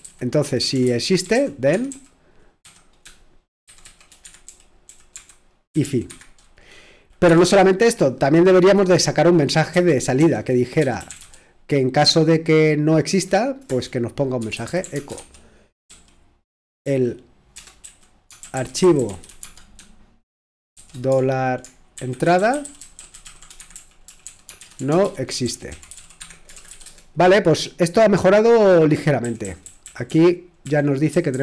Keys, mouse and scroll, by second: 0.0-4.5 typing, 5.8 typing, 7.3 typing, 9.7-11.2 typing, 13.1-27.4 typing, 29.0-31.4 typing.